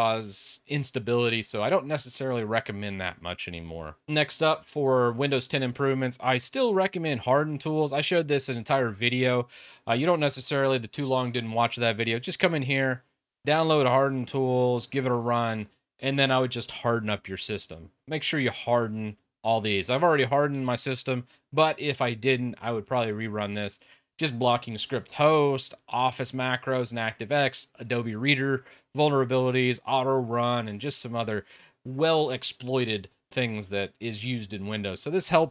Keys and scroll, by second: 4.0-4.8 typing.